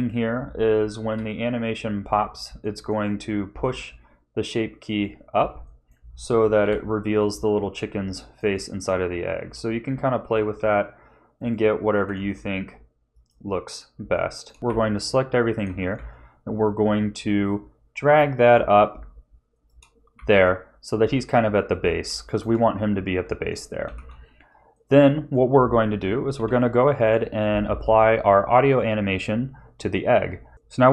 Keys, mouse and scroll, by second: 1.0 KP_3, 2.1-2.4 scroll up 2, 2.6 shift+middle click, 3.6 r, 5.3 a, 5.6 middle click, 6.6 KP_1, 7.6-8.0 scroll down 2, 8.1 shift+middle click, 9.4 l, 10.2 g, 11.9 r, 14.1 shift+middle click, 14.6 Tab, 14.6 a, 15.6 g, 20.1 a, 22.2 shift+middle click, 23.2 Tab, 23.9 ctrl+s, 24.7 middle click, 26.3 KP_1, 27.7 ctrl+s.